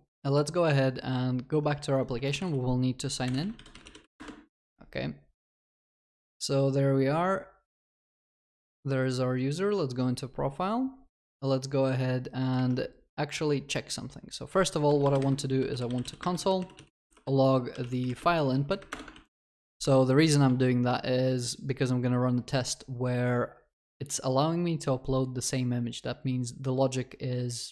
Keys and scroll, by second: 16.2 Return, 19.1 ctrl+s.